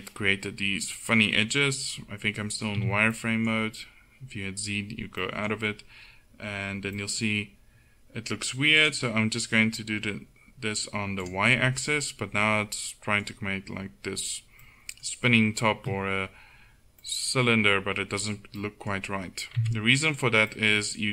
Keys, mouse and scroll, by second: 2.8 z, 8.8-11.3 drag, 11.9-13.1 middle drag, 14.6-17.1 middle drag, 19.6 Tab.